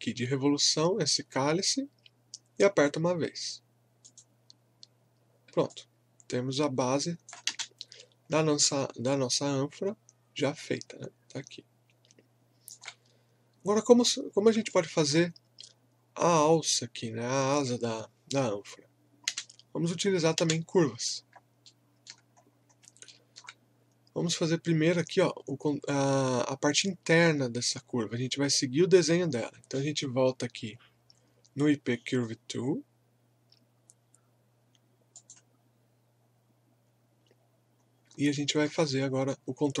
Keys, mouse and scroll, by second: 4.0 click, 5.7-7.5 alt+drag, 7.5 space, 8.2 scroll down 1, 8.6-14.7 alt+drag, 14.7-17.7 alt+drag, 19.3 space, 21.2 scroll up 1, 21.6 alt+middle click, 22.3-22.8 scroll up 1, 23.1 alt+middle click, 35.1 click, 37.9 scroll up 1, 38.4 alt+middle click, 39.0-39.4 scroll up 1.